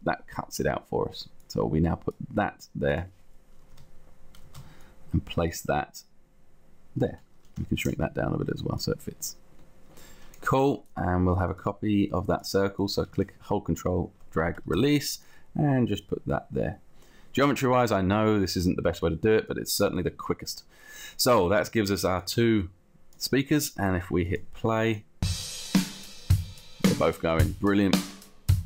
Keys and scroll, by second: 3.9 space, 7.7 t, 14.8 space.